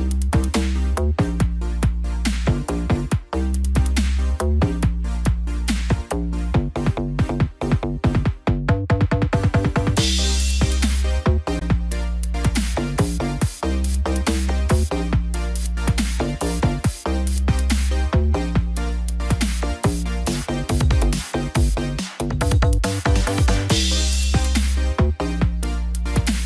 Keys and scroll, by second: 16.0 ctrl+0.